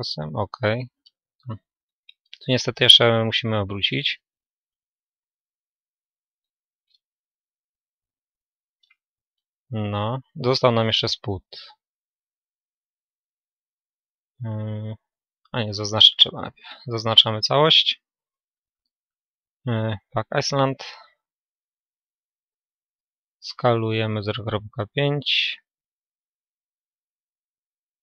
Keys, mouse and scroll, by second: 3.4 click, 3.4 r, 8.0-9.1 drag, 8.0 a, 9.1-11.0 middle drag, 11.0-16.3 right drag, 16.3 a, 20.6-22.7 drag, 22.7 s.